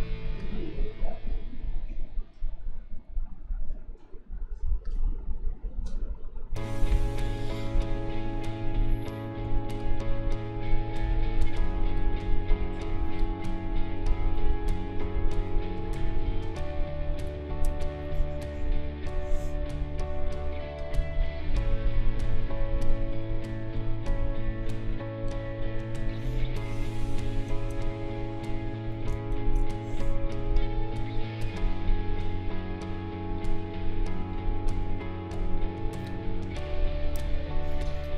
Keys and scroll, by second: 13.7 Delete, 15.0 ctrl+a, 17.2 ctrl+g, 29.3 ctrl+shift+a, 36.6 Delete.